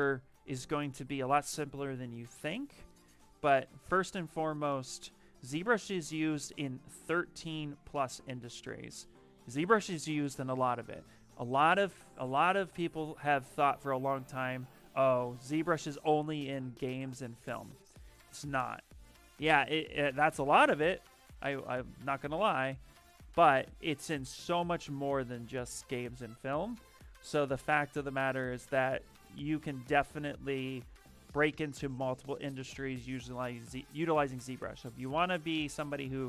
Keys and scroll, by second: 6.2 f, 13.1 s, 15.2-16.3 typing, 18.2 q, 19.5-21.2 typing, 32.5 s.